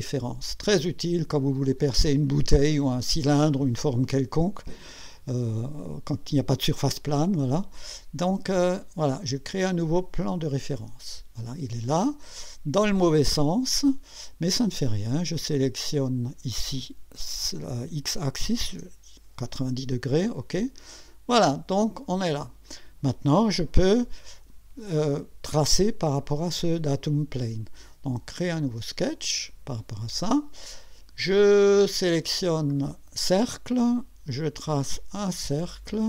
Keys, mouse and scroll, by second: 10.3 click, 15.4 click, 18.3-19.2 typing, 20.3 click, 25.1 click, 28.6 click, 32.7 click, 34.8 click, 35.8 click.